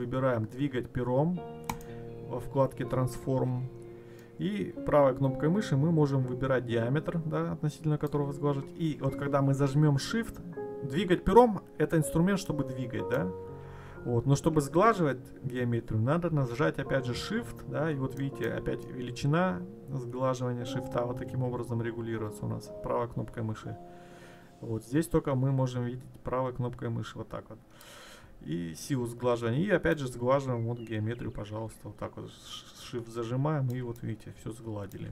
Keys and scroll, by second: 13.6 ctrl+z.